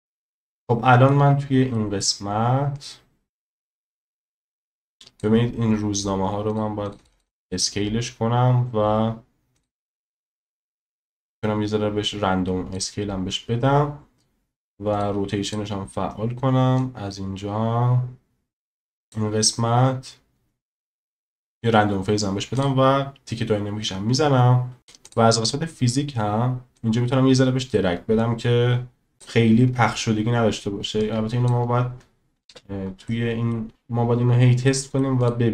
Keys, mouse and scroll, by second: 0.4-1.1 shift+drag, 1.7 shift+middle drag, 2.8-5.2 drag, 6.5 click, 6.9 click, 7.0 click, 7.1 click, 7.3 click, 7.4 click, 10.5-12.7 drag, 14.9 click, 15.5 click, 16.8-18.7 drag, 19.1 click, 22.6 click, 25.0 click, 26.8-29.2 drag, 31.0 click, 32.5 space, 33.1-33.5 middle drag, 34.7 middle click, 35.2 click.